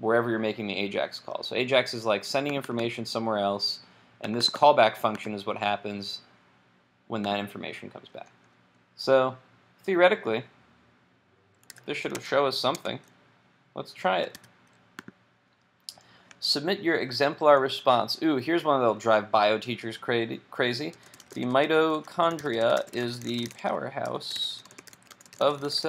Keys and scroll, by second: 11.7 super+s, 12.3 super+Tab, 14.4 super+r.